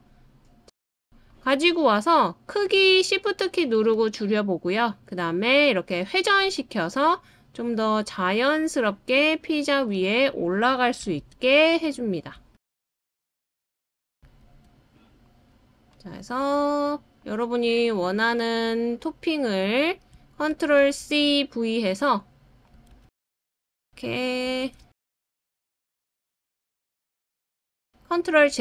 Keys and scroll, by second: 11.0 super+c, 12.5 super+v, 16.3 super+v, 18.1 super+v, 21.5 super+c, 21.7 super+v, 23.5 super+c, 23.7 super+v, 25.2 super+v, 27.3 super+v.